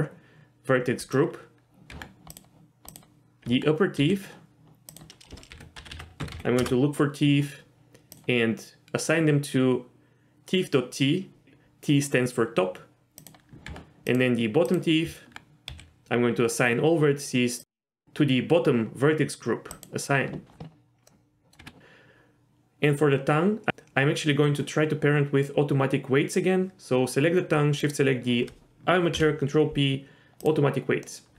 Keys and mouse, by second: 1.0 click, 1.9 Tab, 2.3 click, 3.4 Tab, 4.0 a, 5.0-7.3 drag, 5.9 e, 13.7 Tab, 15.0 Tab, 15.7 a, 17.6 click, 19.7 click, 21.1 middle click, 21.6 Tab, 29.1 ctrl+p, 31.1-31.3 middle drag.